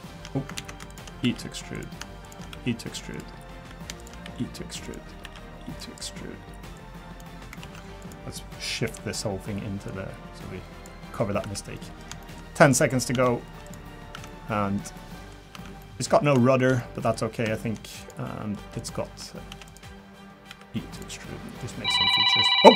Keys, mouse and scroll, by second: 0.6 ctrl+z, 0.9 click, 1.2 e, 2.2 shift+click, 2.5 e, 4.0 shift+click, 4.2 e, 5.2 e, 6.7 click, 7.6 ctrl+z, 8.0 click, 8.8 l, 9.9 click, 11.0-11.4 scroll down 3, 11.4 Tab, 11.7 middle click, 12.2 shift+middle click, 12.6 scroll up 1, 12.9 scroll down 1, 13.1 Tab, 13.6 click, 13.9 scroll down 4, 14.1 Tab, 14.2 middle click, 14.9 middle click, 15.1 shift+middle click, 15.5 Tab, 15.8 middle click, 16.4 shift+middle click, 16.4 shift+middle click, 16.8 middle click, 17.1 scroll up 3, 17.5 shift+middle click, 18.0 click, 18.2 middle click, 18.8 click, 19.5 shift+d, 20.5 e, 21.6 click.